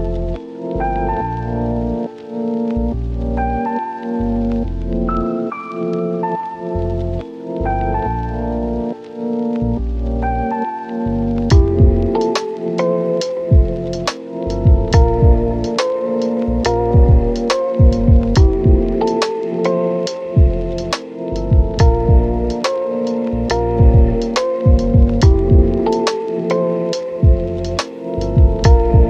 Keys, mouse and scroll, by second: 0.1 Return, 0.4 Tab, 0.7 click, 0.9 scroll up 1, 1.1 Tab, 1.8 ctrl+shift+click, 5.4 scroll down 1, 5.5-6.4 scroll up 3, 5.8 Tab, 6.0 Tab, 6.4 Tab, 6.9 ctrl+shift+click, 8.7 Escape, 9.3 Return, 9.7 Tab, 10.2 ctrl+shift+click, 11.3 Return, 12.1 click, 12.8 scroll down 1, 13.0-13.3 scroll up 1, 13.4 ctrl+shift+click, 13.8 scroll down 1, 14.0 scroll up 1, 14.2 click, 15.7 Return, 16.2 scroll down 1, 16.3-17.2 scroll up 1, 17.2 click, 17.6 right click, 17.8-18.2 scroll up 1, 18.3 ctrl+shift+click, 18.6 scroll up 1, 18.8 click, 19.2 scroll down 1, 19.4 scroll up 1, 19.5 right click, 19.7 scroll down 1, 19.8 scroll up 1, 20.0 right click, 20.3 click, 20.5 scroll down 1, 20.6 scroll up 1, 20.8 ctrl+shift+click, 21.2 ctrl+shift+click, 21.7 click, 21.7 right click, 21.8-22.3 scroll up 3, 21.9 Tab, 22.1 ctrl+shift+click, 22.3 click, 22.5 ctrl+shift+click, 22.9 Tab, 22.9 scroll down 1, 23.0 scroll up 1, 23.2 ctrl+shift+click, 23.5 scroll down 1, 23.5 scroll up 1, 23.7 ctrl+shift+click, 24.0 Tab, 24.0 scroll down 1, 24.1 click, 24.1 right click, 24.2 scroll up 1, 24.3 Tab, 24.4 ctrl+shift+click, 24.5 scroll down 1, 24.5 scroll up 1, 24.6 click, 24.6 scroll down 1, 24.7-25.0 scroll up 1, 25.0 click, 25.3 scroll down 1, 25.4-26.5 scroll up 5, 25.5 Tab, 25.6 right click, 25.7 ctrl+shift+click, 26.0 click, 26.3 right click, 26.6 ctrl+shift+click, 26.9 scroll down 1, 27.0 right click, 27.2 scroll up 1, 27.2 ctrl+shift+click, 27.7-28.0 scroll down 2, 27.8 right click, 27.8 Tab, 28.0 Tab, 28.0-29.0 scroll up 1.